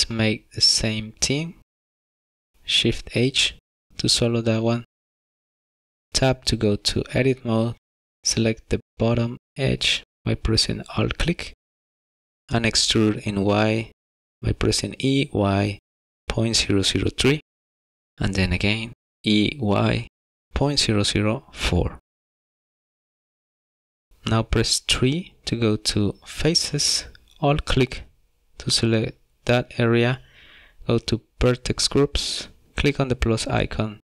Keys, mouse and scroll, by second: 4.1 shift+h, 6.1 middle click, 6.4 Tab, 8.0 shift+middle click, 8.2 2, 9.8 alt+click, 11.3-11.7 scroll up 2, 11.8 shift+middle click, 12.7 e, 13.2 y, 15.4 e, 19.0 e, 19.7 y, 21.9 e, 23.1 3, 23.3 scroll up 2, 23.7 shift+middle click, 24.5 alt+click, 25.7 middle click, 31.7 click, 33.7 click.